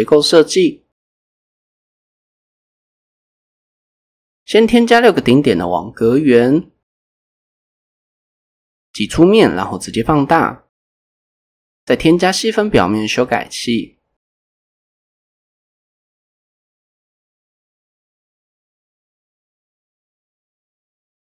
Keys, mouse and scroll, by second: 0.6 click, 1.1 shift+a, 4.2-5.3 drag, 7.2 Tab, 8.3 e, 8.6 s, 9.6 click, 11.2 click, 12.7 drag, 13.6 drag, 15.3 click, 16.1 click, 17.1 click, 18.3 click.